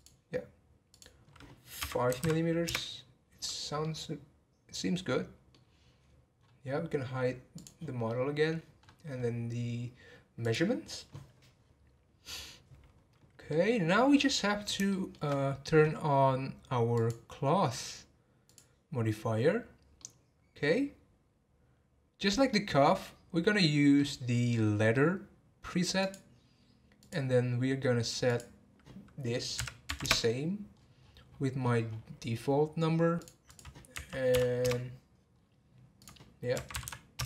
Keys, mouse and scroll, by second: 0.9-2.2 drag, 2.2 m, 3.7 scroll up 2, 3.8-5.6 middle drag, 5.6 scroll down 2, 6.2-6.6 scroll down 8, 7.5 click, 8.0 middle click, 8.8 scroll up 1, 10.4 click, 13.5-16.9 middle drag, 16.9-20.0 drag, 20.0-23.0 middle drag, 23.9-26.0 middle drag, 26.0-30.8 drag, 30.8 scroll down 3, 31.3-31.8 scroll down 12, 32.9 scroll down 7, 33.2 click, 33.5-35.3 drag, 35.3-36.0 scroll down 2, 36.0 click, 36.8 m.